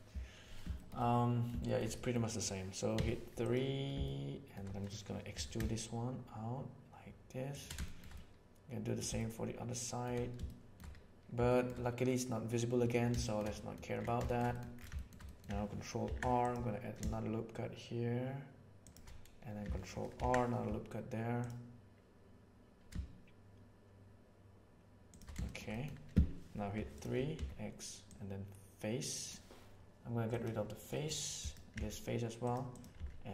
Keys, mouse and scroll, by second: 0.7 shift+middle click, 1.1 middle click, 1.7 shift+middle click, 1.9 middle click, 2.9 3, 4.0 shift+middle click, 5.3 e, 7.8 middle click, 8.1 middle click, 9.1 shift+middle click, 10.3 shift+middle click, 11.4 shift+middle click, 13.2 shift+middle click, 13.5 middle click, 14.2 shift+middle click, 14.5 middle click, 14.9 shift+middle click, 15.2 middle click, 16.0 ctrl+r, 20.1 ctrl+r, 25.4 shift+middle click, 25.7 middle click, 26.7 3, 27.3 x, 30.9 middle click, 31.3 click, 31.7 x, 32.9 x.